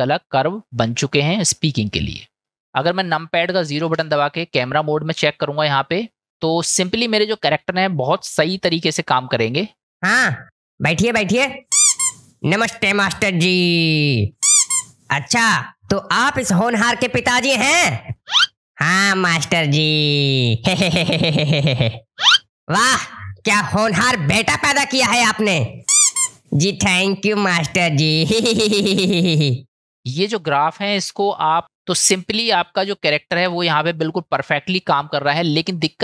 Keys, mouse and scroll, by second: 1.9 middle click, 3.9 KP_0, 9.8 space.